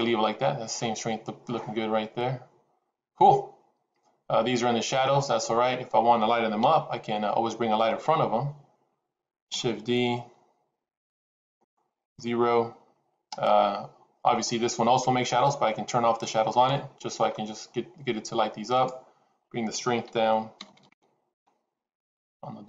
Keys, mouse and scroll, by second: 6.6 KP_7, 9.6 shift+d, 12.0 KP_0, 16.5 click, 18.8-22.2 drag, 20.6 KP_0, 20.8 KP_0.